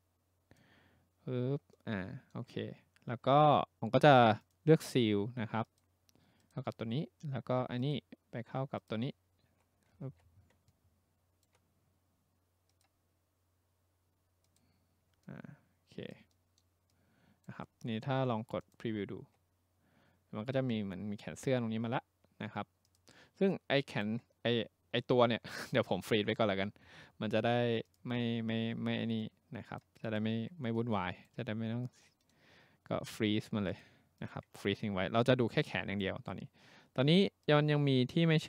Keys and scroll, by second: 10.1 ctrl+z.